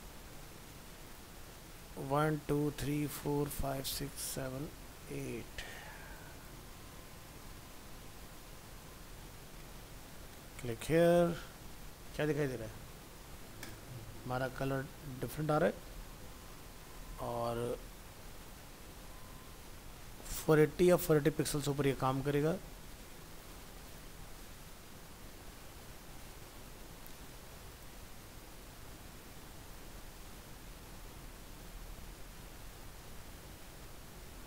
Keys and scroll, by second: 8.2 ctrl+s, 8.6 alt+Tab.